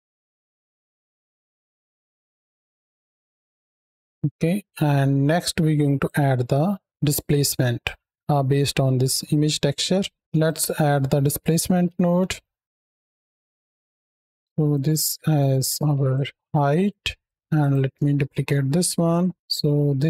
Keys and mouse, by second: 0.4 space, 0.6 z, 0.9 middle drag, 1.4-1.8 drag, 2.1 shift+click, 2.3 click, 2.6 space, 2.7 space, 2.8 click, 3.1 shift+click, 3.4 click, 3.9 middle click, 4.3 middle click, 5.2 click, 6.2 middle click, 7.1-7.6 drag, 10.2 x, 10.2 shift+a, 13.1 drag, 13.4 click, 14.6-16.0 drag, 16.7 click, 17.4 click, 18.0 ctrl+shift+d, 18.9 click.